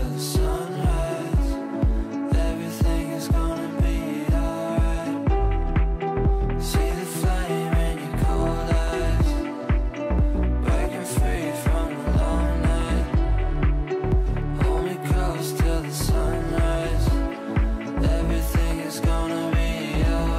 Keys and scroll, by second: 0.7 ctrl+z, 1.9 Delete.